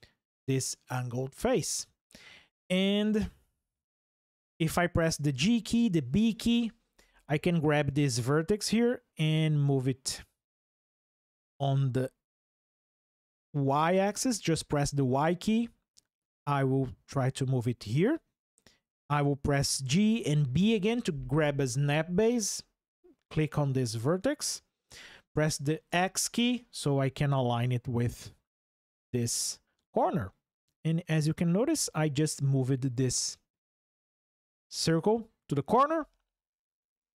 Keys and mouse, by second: 5.1 g, 5.6 b, 12.3 x, 13.3 y, 17.0 click, 19.6 g, 20.1 b, 25.7 x, 28.9 click.